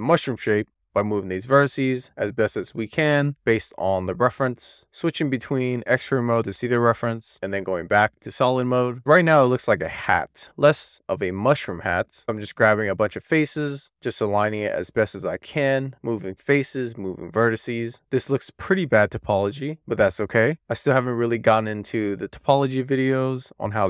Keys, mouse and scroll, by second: 0.4 alt+z, 1.1 click, 3.9 alt+z, 4.2 alt+z, 4.8 click, 5.8 click, 6.9 alt+z, 8.0 alt+z, 8.8 super+z, 9.3 alt+z, 11.8 alt+z, 12.1 click, 12.3 alt+click, 12.6 shift+click, 13.6 alt+z, 13.9 alt+z, 14.2 alt+z, 14.5 click, 15.5 click, 16.1 super+z, 16.5 click, 17.1 shift+click, 18.6 super+z, 18.7 click, 19.0 scroll up 1, 19.2 click, 19.7 alt+z, 20.0 scroll down 1, 20.1 alt+z, 20.5 click, 21.2 alt+z, 21.4-21.9 alt+z, 22.0 click, 22.3 alt+z, 22.4 click, 22.9 super+z, 23.2 click, 23.5 alt+z.